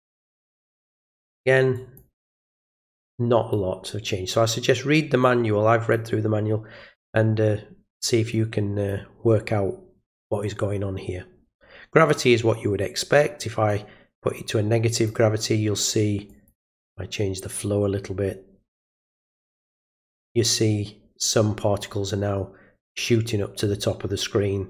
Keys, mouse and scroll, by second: 0.1 click, 0.9 click, 1.7 click, 3.1 click, 5.2-5.9 drag, 8.3 click, 13.7-15.1 drag, 16.3 click, 18.7 click.